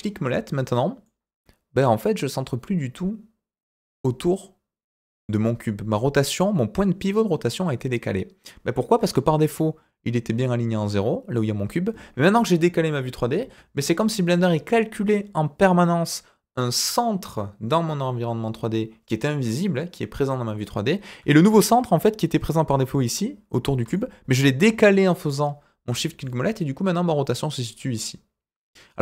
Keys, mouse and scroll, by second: 1.0-9.1 middle drag, 21.8-22.6 shift+middle drag, 22.7-23.6 middle drag, 23.9-25.8 shift+middle drag, 26.2-29.0 middle drag.